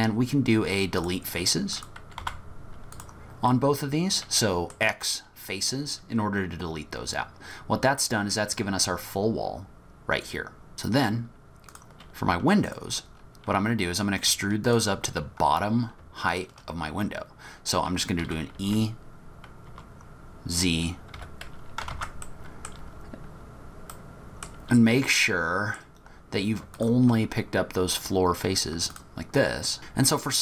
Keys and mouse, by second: 2.2 x, 3.5 middle click, 12.7 shift+click, 14.7 shift+click, 14.8 shift+middle click, 15.4 middle click, 16.0 shift+middle click, 16.8 middle click, 18.2 e, 21.9 ctrl+z, 22.3 middle click, 23.9 click, 25.1 click, 29.7 ctrl+z.